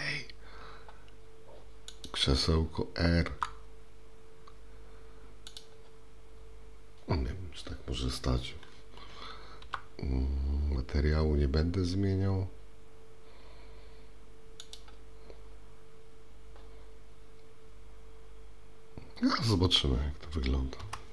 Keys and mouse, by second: 2.0 click, 3.3 r, 9.6 g.